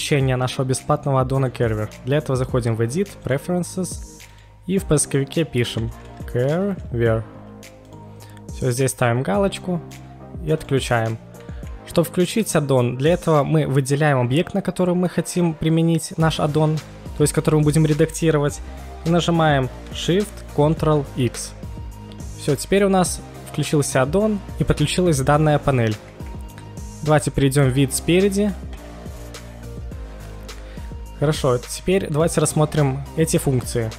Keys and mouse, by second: 1.4-3.5 drag, 20.7 ctrl+shift+x, 28.7 KP_1, 29.6 KP_1.